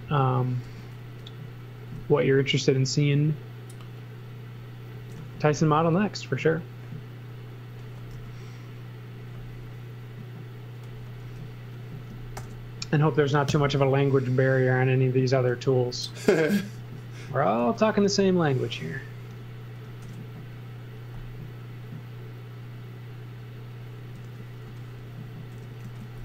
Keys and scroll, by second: 0.7 l, 4.9 space, 5.1 z, 8.1 c, 11.2 space, 12.3 shift+g, 13.5 Return, 14.2 z, 16.7 x, 17.6 z, 18.6 z, 19.3 r, 20.0 shift+5, 24.1 z, 24.6 x, 25.5 m.